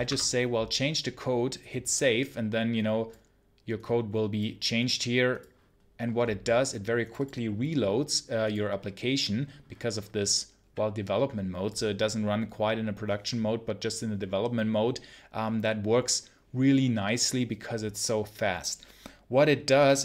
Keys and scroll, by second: 0.0 Return.